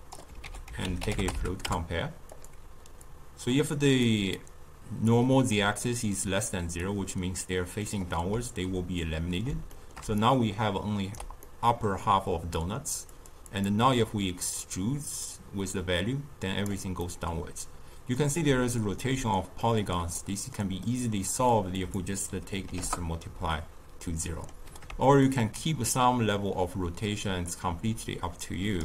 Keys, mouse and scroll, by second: 0.4 ctrl+a, 3.0 click, 4.3-8.3 drag, 8.3 d, 8.9-10.0 middle drag, 10.0 d, 10.1-11.4 right drag, 11.4-13.0 middle drag, 13.0-17.0 drag, 17.0-18.4 middle drag, 18.4 d, 18.9 d, 19.5-21.7 middle drag, 21.7-23.5 drag, 23.5-25.2 middle drag, 25.2-28.3 shift+drag.